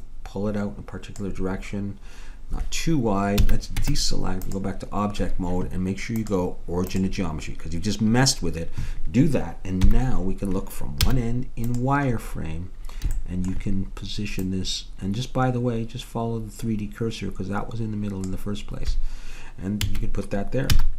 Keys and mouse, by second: 0.1 click, 3.4 a, 3.8 Tab, 6.2-8.0 drag, 9.9 KP_1, 11.1 z, 14.6 middle click, 14.9-16.3 drag, 19.9 a, 20.7 z.